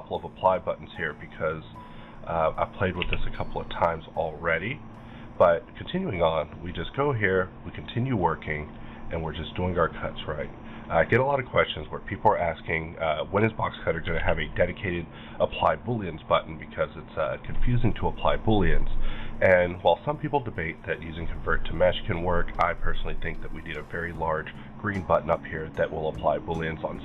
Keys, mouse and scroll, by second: 0.3 click, 1.0 right click, 1.7 click, 3.0 q, 3.7 click, 4.1 click, 5.4 middle click, 5.9-6.4 scroll up 1, 6.4 click, 6.7 middle click, 7.3-9.1 drag, 9.1 click, 9.7-11.3 drag, 11.1 middle click, 11.3 scroll down 1, 12.0 click, 12.1-14.1 drag, 14.1 alt+a, 14.5 middle click, 14.9 scroll up 1, 15.4 click, 15.7 scroll down 1, 15.9-18.7 middle drag, 16.9 scroll down 1, 18.7 middle click, 18.8 scroll up 1, 26.2-27.0 middle drag, 26.2-26.5 scroll up 1.